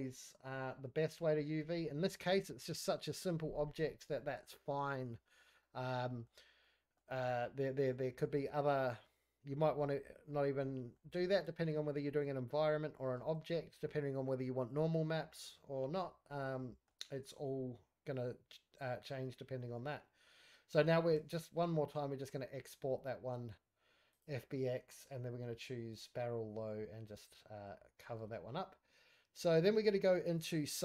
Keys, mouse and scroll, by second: 1.0 click, 1.6 scroll up 2, 1.8 scroll down 1, 1.8-2.4 middle drag, 2.8 scroll up 1, 2.8-3.3 scroll down 1, 3.3 scroll up 2, 3.5 middle drag, 3.8-4.1 scroll down 2, 4.1-4.5 middle drag, 4.5-4.9 scroll up 2, 4.9-5.4 middle drag, 5.4 scroll down 1, 5.6-6.2 middle drag, 6.4 scroll up 2, 6.6-6.9 middle drag, 7.0 scroll down 2, 7.2-7.9 middle drag, 7.9-8.3 scroll down 3, 8.3-8.6 scroll up 2, 8.6 scroll down 1, 8.7 middle drag, 9.1-9.4 scroll up 3, 9.4 middle drag, 9.9-10.2 scroll up 1, 10.2-10.5 middle drag, 10.9 shift+middle click, 11.6 middle click, 12.0 middle drag, 12.2-12.9 shift+scroll down 1, 13.1-13.4 shift+middle drag, 13.5-13.9 middle drag, 14.7 scroll down 1, 15.1 middle drag, 15.4 scroll down 1, 15.6-15.9 scroll up 4, 15.9-16.3 middle drag, 16.3 scroll down 2, 16.5 middle click, 21.1 q, 28.1 middle click, 29.1 middle click, 29.1 scroll down 1, 30.7 middle click.